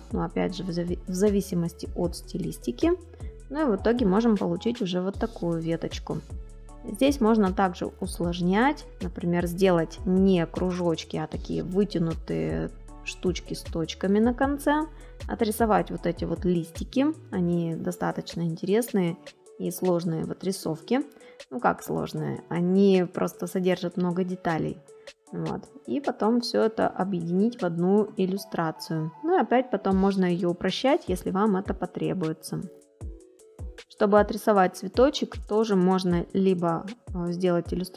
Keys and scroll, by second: 2.3 space, 13.7 space, 16.9 space, 20.2 space, 24.4 space, 30.0 space.